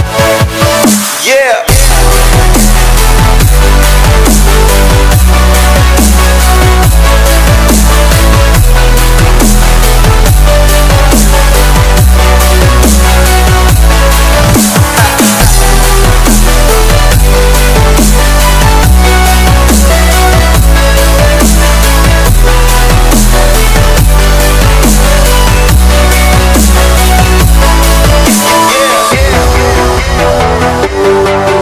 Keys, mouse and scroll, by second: 5.0-5.5 scroll down 1, 5.5-7.4 drag, 7.4-8.0 scroll down 1, 8.3 click, 10.1 s, 11.3-13.4 drag, 13.4 Delete, 14.9 scroll up 1, 15.4 right click, 16.0 click, 17.4 right click, 18.1 click, 21.2 click, 22.8-25.3 drag, 25.6 click, 26.9 s, 27.6-30.4 drag, 31.3-31.6 scroll up 1.